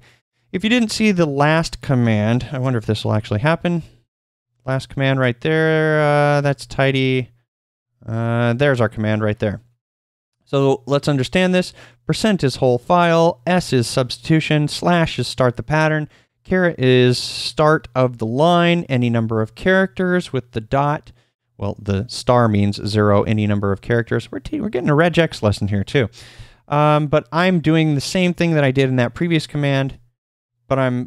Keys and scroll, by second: 3.8 ctrl+p, 5.5 ctrl+p, 6.5 ctrl+n, 7.0 ctrl+n.